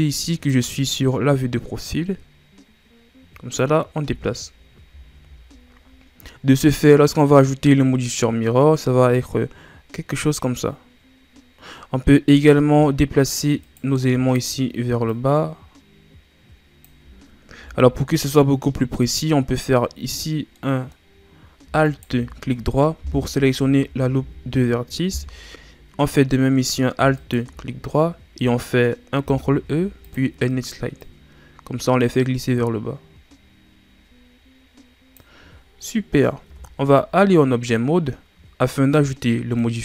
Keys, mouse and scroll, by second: 0.5-3.5 drag, 4.0 z, 4.5-5.0 scroll down 3, 5.5-6.7 scroll up 1, 6.7-9.8 scroll up 3, 12.3 right click, 13.6 shift+right click, 15.0-17.5 drag, 17.5 ctrl+z, 20.6 middle click, 21.0-21.8 scroll down 1, 21.8 alt+right click, 23.0 KP_1, 24.0 KP_6, 24.1 KP_3, 25.3-25.8 scroll up 1, 27.1 alt+shift+right click, 29.2 ctrl+e, 36.4 Tab, 36.8-37.7 scroll down 4, 37.7-39.8 middle drag.